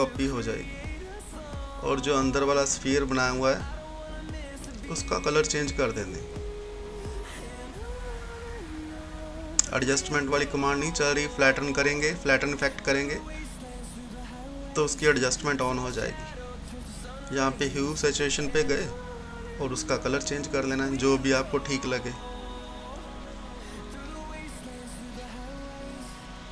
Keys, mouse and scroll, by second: 1.3 right click, 1.3 right click, 2.1 click, 7.1 click, 11.6 click, 14.2-22.9 drag, 22.9 click.